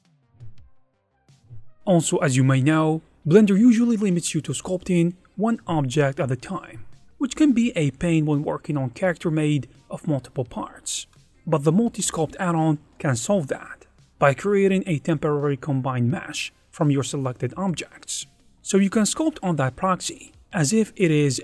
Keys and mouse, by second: 3.4-6.8 typing, 3.9 click, 4.1 ctrl+shift+x, 4.9 click, 5.6 click, 5.9 click, 8.4-11.0 typing, 8.5 click, 10.1 click, 11.0 click, 12.0 ctrl+Tab, 12.4 click, 13.6-15.0 drag, 15.2 click, 19.7 click, 20.4 ctrl+Tab, 20.7 f, 20.8 click, 20.9 alt+3.